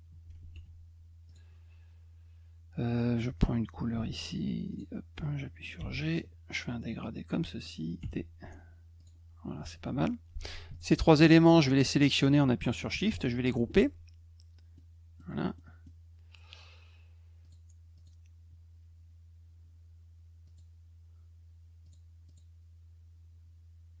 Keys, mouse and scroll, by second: 0.5 F2, 1.3 click, 3.9 d, 4.7 click, 6.2-7.6 drag, 8.0 d, 9.0 click, 10.7 shift+click, 11.2 shift+click, 13.5 ctrl+g, 14.7 middle click, 15.6 middle click, 17.4 click, 17.9 click, 20.4 click, 21.8 click, 22.3 click.